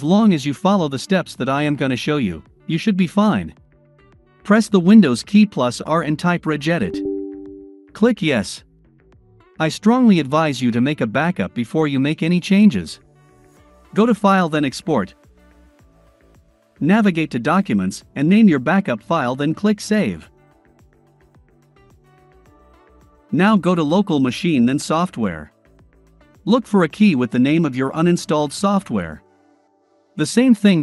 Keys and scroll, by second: 4.3 super+r.